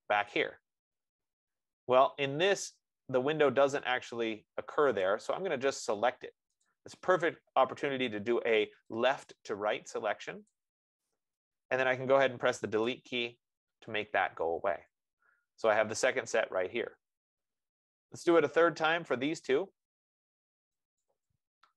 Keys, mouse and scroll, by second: 0.8 click, 1.5-2.5 scroll, 2.5 scroll, 5.3 scroll, 7.1 click, 10.5 F15, 10.7 click, 13.1 BackSpace, 14.8-15.5 scroll, 17.7-18.3 scroll, 21.3 click.